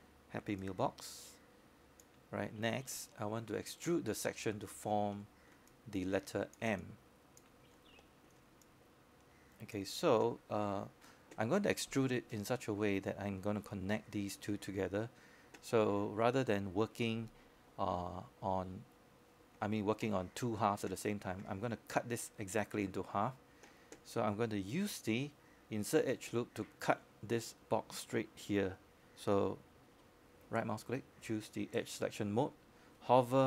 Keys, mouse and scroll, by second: 0.6-5.9 drag, 6.2 alt+click, 10.3 scroll up 1, 10.8 alt+middle click, 11.4 alt+click, 12.5 alt+click, 13.5 scroll up 1, 13.8 alt+middle click, 14.1 scroll down 1, 14.4 alt+click, 27.0-32.2 scroll down 1, 32.2-33.1 scroll up 1, 33.1-33.4 scroll down 1.